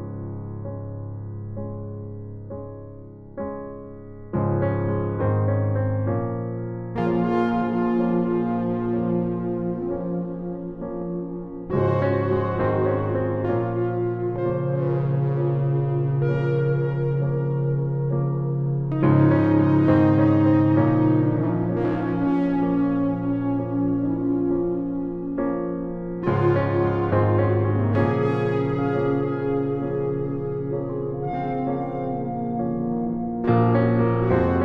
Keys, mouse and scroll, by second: 7.0-8.8 right drag, 7.8 f, 10.1 a, 10.4 c, 17.7-19.5 right drag, 18.4 f, 21.1 ctrl+z, 25.4 f, 27.7 a, 28.1 c.